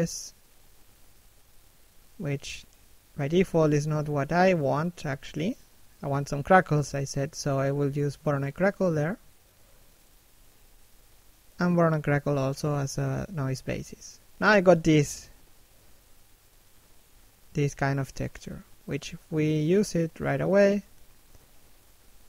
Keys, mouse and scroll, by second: 0.6 click, 2.2 click, 3.1 middle click, 17.3 f, 19.2 right click, 19.5 middle click, 20.4 click.